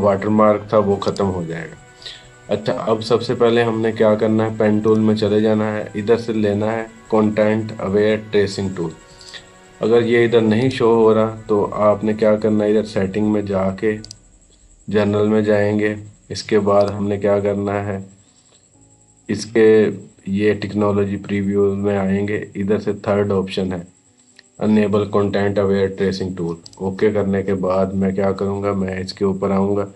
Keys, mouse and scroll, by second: 0.9 click, 4.7 right click, 7.2 typing, 9.0 click, 13.9 click, 13.9 typing, 16.6 click, 26.5 click.